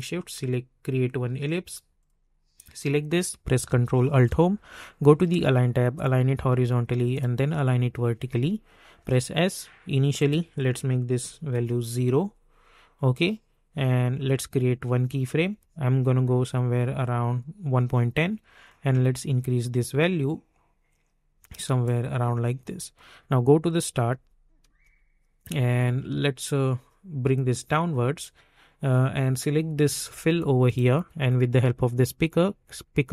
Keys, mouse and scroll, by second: 4.1 ctrl+alt+Home, 5.9 click, 9.0 s, 10.1 click, 11.5 Return, 13.1-14.6 drag, 17.1-24.1 drag, 24.1 space, 27.3-33.1 drag.